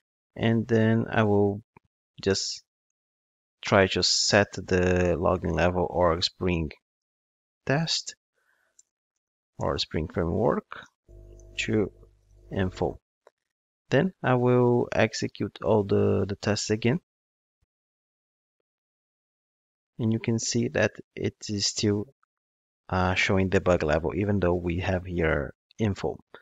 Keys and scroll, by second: 15.9 ctrl+d.